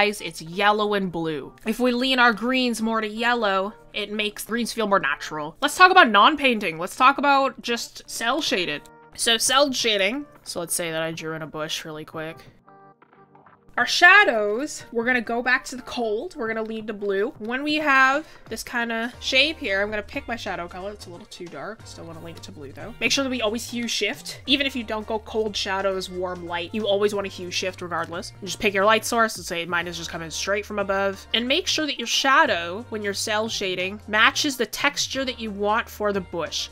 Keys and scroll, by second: 0.6 ctrl+z, 8.2 ctrl+z, 12.8-13.3 scroll, 19.8 ctrl+z, 22.6 ctrl+z.